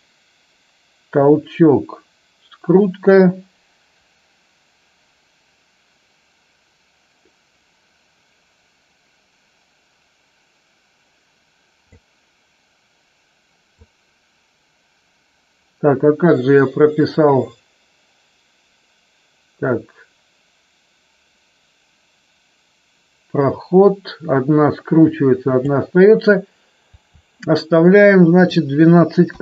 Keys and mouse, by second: 13.7-25.6 drag, 28.2-29.4 drag.